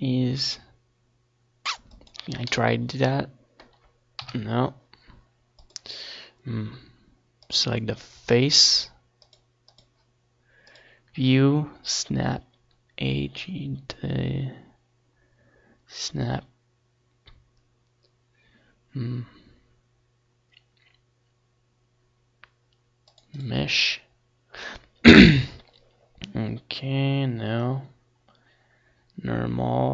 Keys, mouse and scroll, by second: 0.4-2.1 middle drag, 2.1 KP_3, 3.5-5.2 drag, 5.4-7.2 drag, 7.3-8.7 drag.